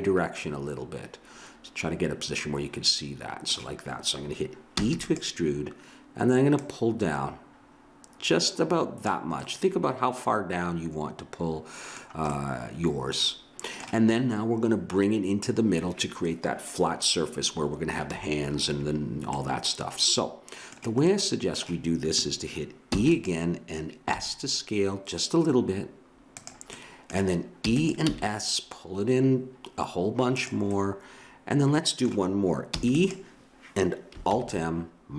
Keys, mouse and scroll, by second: 0.3-2.3 middle drag, 4.8 e, 6.6-8.4 drag, 9.4-11.3 middle drag, 12.3-14.4 middle drag, 19.3-21.2 middle drag, 21.4 middle click, 22.9 e, 24.1 s, 27.6 e, 28.0 s, 30.7 middle click, 32.7 e, 34.3 alt+m.